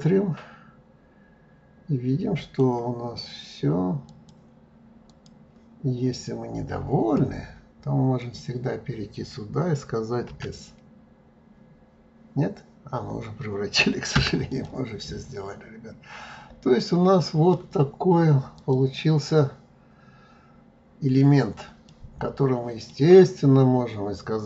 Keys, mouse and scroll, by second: 4.1 click, 5.1 click, 6.0-6.4 scroll up 2, 8.2 click, 10.3 s, 14.5 click, 15.0-18.0 middle drag, 18.6 click, 19.4-21.2 middle drag, 21.2 scroll down 2, 21.9-24.4 middle drag.